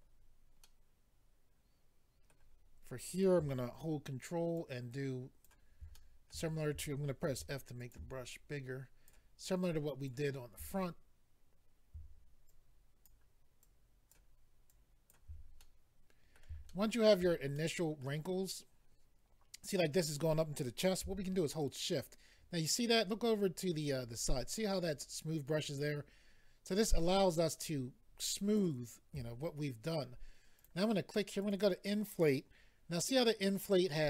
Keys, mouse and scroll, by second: 0.6 middle click, 4.6 ctrl+click, 5.9 middle click, 7.3 ctrl+f, 7.8 click, 8.3 ctrl+click, 9.6 ctrl+click, 12.4 ctrl+click, 13.6 ctrl+click, 14.7 ctrl+click, 15.6 middle click, 16.7 shift+middle click, 17.5 middle click, 21.6 shift+click, 30.6 click, 30.7 click, 31.4 click, 31.5 click.